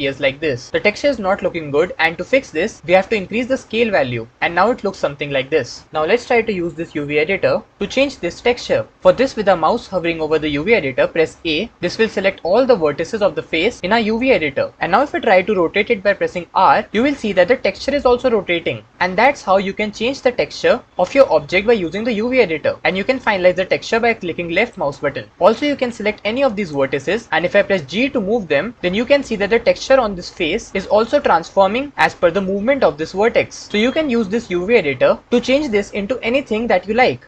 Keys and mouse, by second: 11.2 a, 16.0 r, 27.6 g.